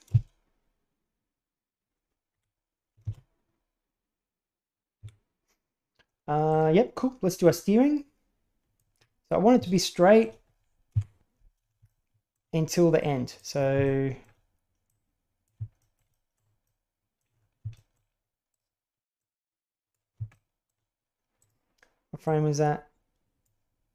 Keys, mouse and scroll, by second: 0.0 shift+space, 2.3 Escape, 2.9 shift+space, 5.0 Escape, 6.5 right click, 7.4-8.7 drag, 9.6-10.1 shift+middle drag, 10.8 KP_7, 11.8-12.2 shift+middle drag, 13.0-13.3 middle drag, 13.3 click, 13.7 shift+middle click, 14.8-15.4 drag, 15.7 shift+middle click, 16.5-17.1 middle drag, 17.6 shift+middle click, 19.2-19.9 drag, 20.2 shift+middle click, 21.3 click, 22.2 right click.